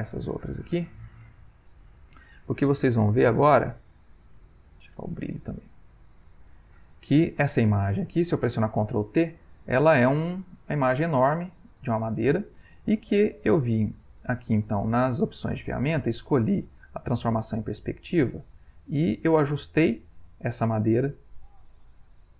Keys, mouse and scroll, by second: 1.0 click, 3.3-4.5 drag, 5.1 click, 6.1 click, 7.3 click, 8.2 middle click, 8.7 ctrl+t, 9.5 ctrl+middle click, 11.0-12.7 ctrl+middle drag, 14.0 click, 15.4 click, 16.9 click, 18.6-20.2 drag, 20.7-22.0 drag.